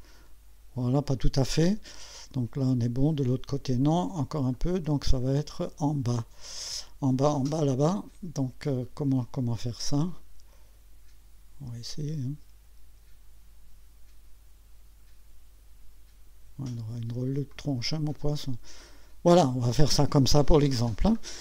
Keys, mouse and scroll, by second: 4.3 click, 11.9-16.5 drag, 17.5 click, 21.3 scroll down 1.